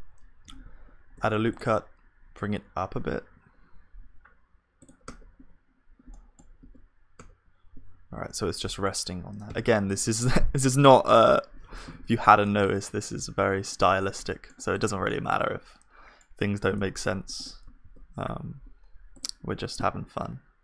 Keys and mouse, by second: 1.1 ctrl+r, 5.1 Tab, 6.1-8.5 middle drag, 6.6 KP_1, 7.2 Tab, 9.5 ctrl+s, 9.9-12.2 drag, 13.1-17.2 middle drag, 15.1-17.0 drag, 15.3 right click, 16.0 right click, 17.0 KP_1, 17.8 shift+a.